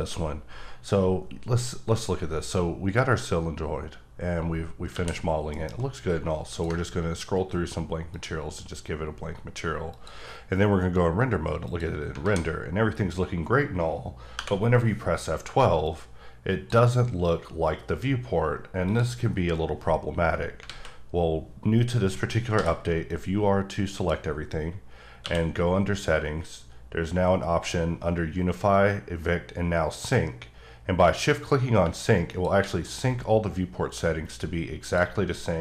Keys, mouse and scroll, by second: 4.9 a, 5.5 alt+m, 6.5 ctrl+click, 6.8-8.1 scroll up 5, 8.1 click, 9.9 click, 11.7 click, 12.2 alt+a, 14.3 F12, 15.8 click, 18.8 click, 20.6 alt+a, 22.5 b, 23.1 click, 25.2 q, 31.8 shift+q, 32.3 shift+click.